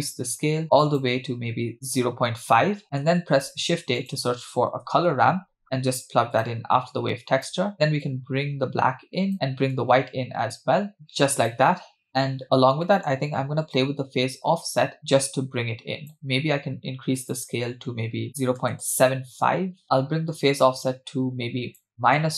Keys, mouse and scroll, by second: 1.0-2.0 drag, 2.8-3.2 scroll down 2, 3.2 middle click, 3.3 shift+a, 7.2 click, 8.0-9.3 drag, 10.1 click, 12.4 scroll up 3, 12.9 middle click, 13.8-16.2 shift+drag, 17.2-18.8 drag, 19.8-22.3 shift+drag.